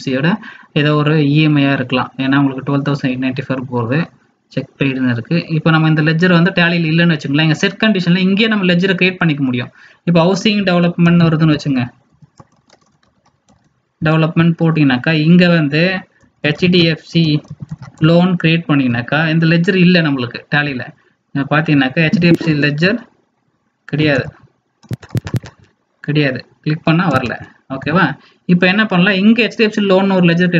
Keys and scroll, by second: 27.7 alt+Tab.